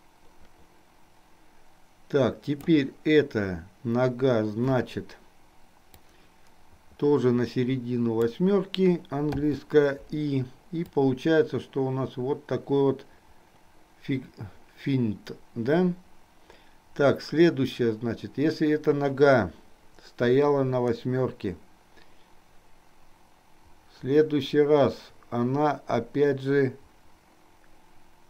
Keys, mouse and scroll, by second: 5.9-8.8 drag, 11.2-28.2 drag.